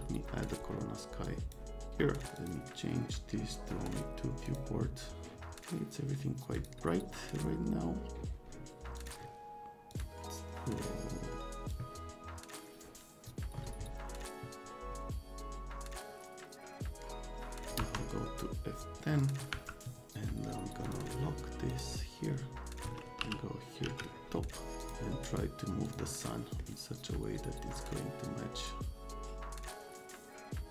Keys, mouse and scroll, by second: 6.5 middle click, 9.0 click, 9.9 click, 11.7-17.6 drag, 17.8 F7, 19.2 click, 19.5 F10, 20.8 click, 21.7 click, 23.2 t, 23.8 z, 24.8 click, 25.2 scroll down 2, 25.9 click, 26.2-26.6 right drag, 27.8-30.7 drag.